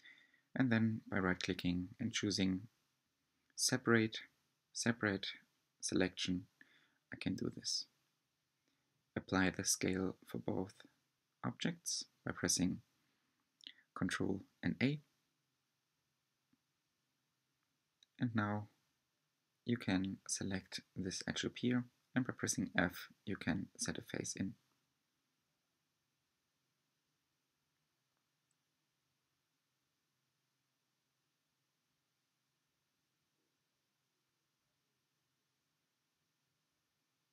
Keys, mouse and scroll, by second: 3.0 g, 6.2 ctrl+a, 8.8 click, 10.1 ctrl+a, 11.7 click, 12.8 h, 13.5 click, 14.4 Tab, 14.9-15.5 scroll up 2, 15.5-17.3 middle drag, 17.3 2, 19.0 alt+click, 21.7 f, 22.4-25.4 middle drag, 25.4 alt+click, 26.9 f, 28.0-29.9 middle drag, 29.9 Tab, 30.4-33.5 middle drag, 36.6-37.0 scroll down 2, 37.1-37.3 middle drag.